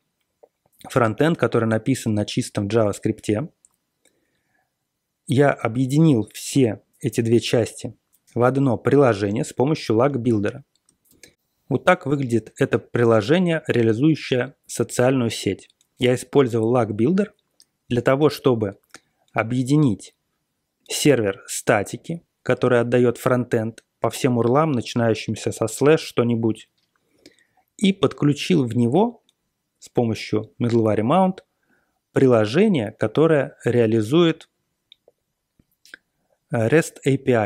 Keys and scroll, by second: 11.2 ctrl+x.